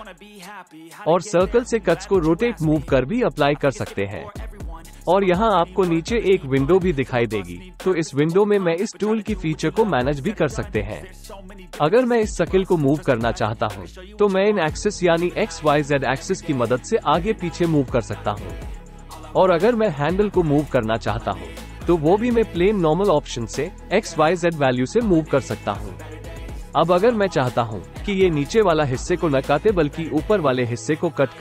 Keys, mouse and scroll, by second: 16.3-21.1 drag, 22.2-27.1 drag, 28.2-30.0 drag.